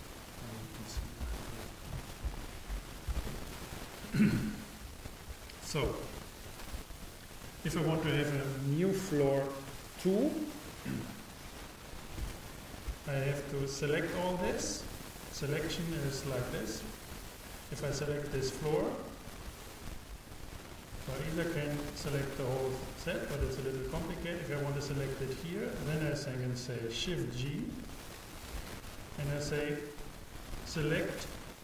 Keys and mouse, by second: 0.6-3.1 drag, 4.3-6.5 drag, 4.9 n, 16.4 a, 18.0-20.2 drag, 27.7 shift+g.